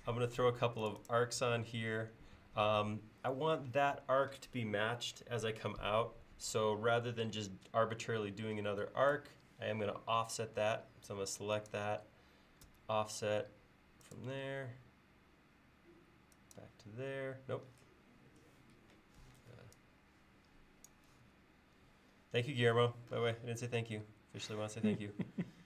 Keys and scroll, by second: 11.2 space, 12.7 f.